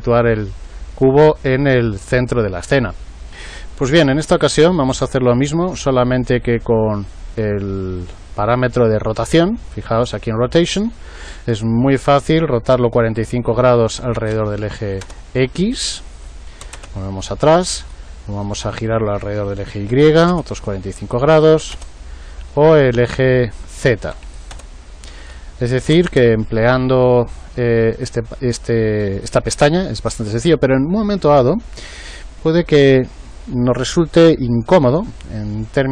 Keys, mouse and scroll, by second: 11.8 click, 16.1-20.4 drag, 21.0 click, 23.2 click, 25.2 click.